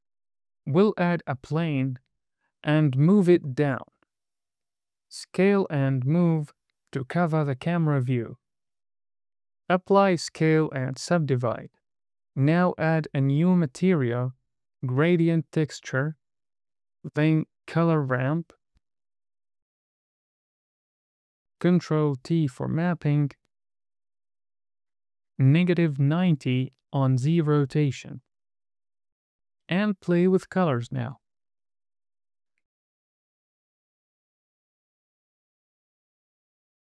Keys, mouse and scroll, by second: 2.4 click, 4.1 KP_0, 4.9 scroll down 2, 5.0 scroll up 3, 5.3 shift+middle click, 5.5 s, 6.4 click, 6.5 g, 6.8 y, 8.6 click, 9.6 super+a, 10.6 Tab, 11.0 right drag, 11.5 click, 11.7 KP_0, 12.8 click, 14.7 drag, 15.1 shift+a, 18.0 click, 19.7 click, 19.9 click, 20.4 click, 20.9 drag, 21.5 middle click, 22.5 click, 23.9 ctrl+t, 25.4-26.2 drag, 27.0-28.8 drag, 29.5 middle click, 29.5 click, 30.3 click, 32.1 drag, 32.2-33.7 drag, 33.8 click, 34.5 click, 34.8 drag, 35.2 click, 35.4 click, 35.6 super+v, 36.4 click.